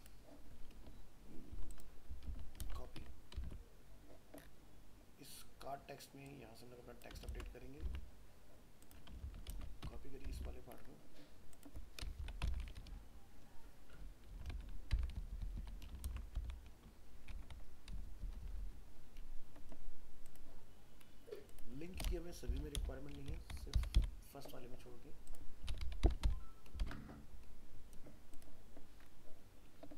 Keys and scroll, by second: 2.3 ctrl+a, 2.6 ctrl+c, 3.5 alt+Tab, 7.3 ctrl+v, 7.9 alt+Tab, 9.3 ctrl+a, 9.5 ctrl+c, 10.3 alt+Tab, 16.0 ctrl+v.